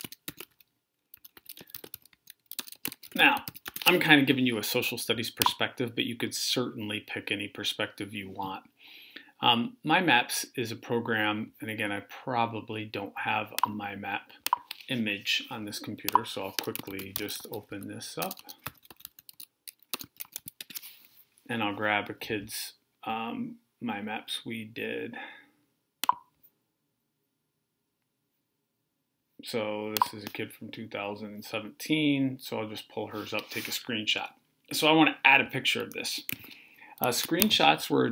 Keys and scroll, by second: 0.0-3.8 typing, 16.7-20.7 typing, 36.9 shift+super+4.